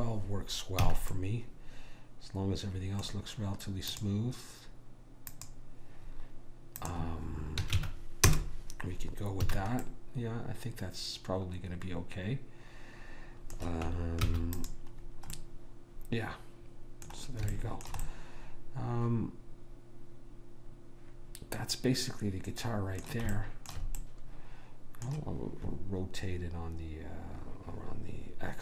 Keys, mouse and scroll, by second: 1.0 a, 1.3-3.1 middle drag, 4.1-8.8 drag, 9.6 a, 14.4 ctrl+s, 15.5-17.6 middle drag, 17.8-20.0 middle drag, 23.5-26.1 middle drag.